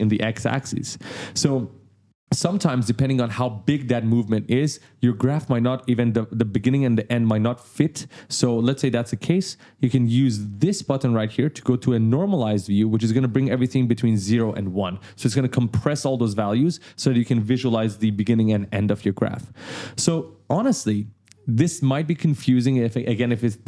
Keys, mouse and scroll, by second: 8.3-8.6 ctrl+scroll up 1, 10.9 click, 12.5 click, 20.2 right click.